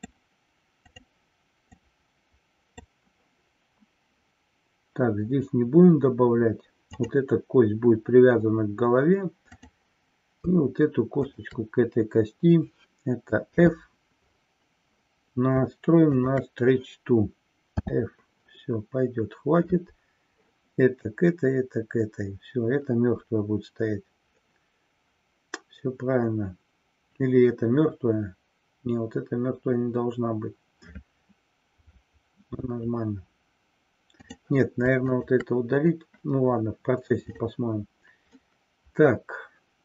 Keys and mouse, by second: 0.8 click, 1.7-2.8 drag, 7.0 click, 9.6-10.0 drag, 11.2 shift+click, 16.1 click, 34.1-34.4 drag, 35.2 shift+click, 37.3 drag, 38.3-39.8 middle drag.